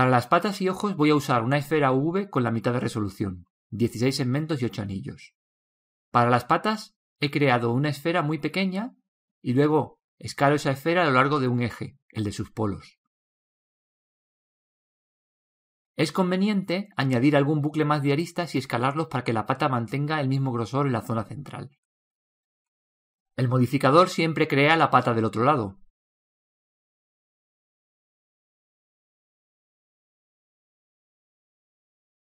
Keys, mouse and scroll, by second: 0.0 click, 3.1 click, 6.9 s, 10.8 s, 17.6 ctrl+r, 21.1 click, 24.5 ctrl+r, 27.9 click, 31.3 Tab.